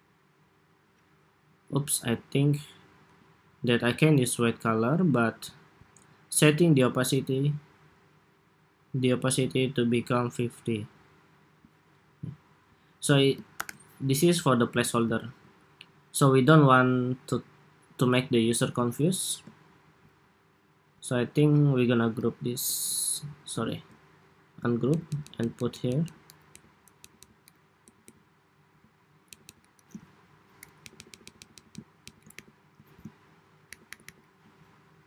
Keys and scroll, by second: 13.3 super+-, 15.0 super+s, 22.2 super+g, 23.6 super+z, 30.5 alt+Down, 30.7 alt+Down, 31.1 alt+Down, 31.3 alt+Down, 31.5 alt+Down, 32.1 alt+Up, 33.5 alt+Up, 34.1 alt+Up.